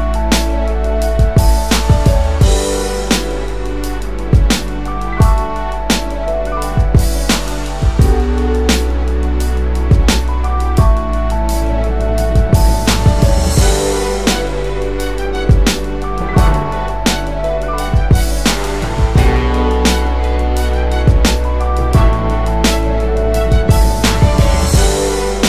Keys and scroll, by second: 0.1-1.1 typing, 1.8 Tab, 2.5-3.2 typing, 3.6 Return, 12.6 typing.